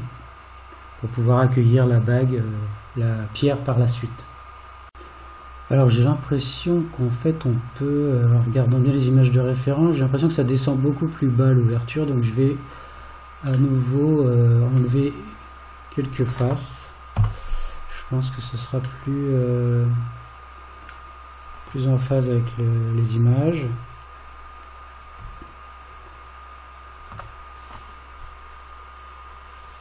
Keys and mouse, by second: 13.8-14.8 middle drag, 15.6 click, 17.2 3, 18.1 click, 19.0-20.8 middle drag, 25.8 shift+click, 26.9 shift+click.